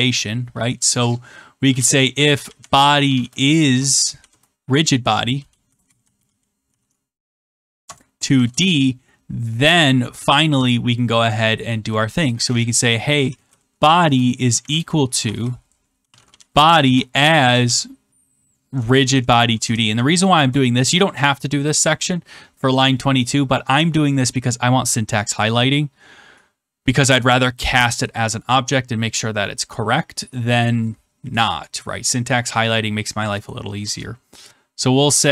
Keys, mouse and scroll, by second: 1.4-4.6 typing, 5.8-8.3 typing, 7.8 Return, 8.4 Return, 13.0-17.9 typing, 18.9 Down, 19.0 Down, 19.5 Return, 20.3 Return.